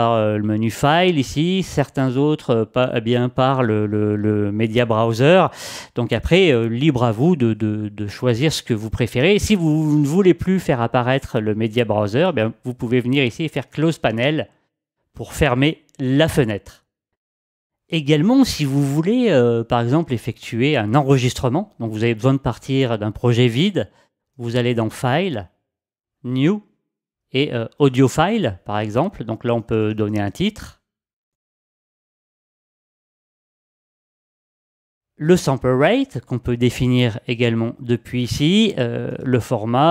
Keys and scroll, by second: 31.0-32.8 typing.